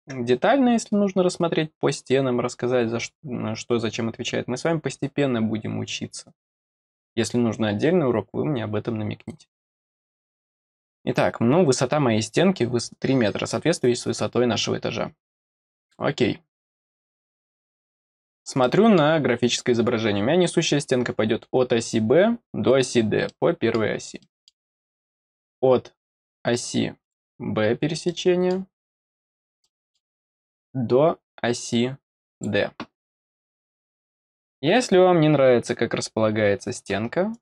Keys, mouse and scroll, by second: 2.2-2.6 scroll up 1, 9.5 scroll down 2, 15.7 click, 17.8 scroll up 2, 18.2-18.6 scroll down 2, 18.6 middle click, 19.8 middle click, 19.8-20.1 scroll down 1, 23.2 middle click, 24.1 middle click, 24.7-25.0 scroll up 1, 25.0-27.0 scroll down 1, 27.0 click, 28.0 middle click, 29.6 middle click, 32.3 click, 37.3 click.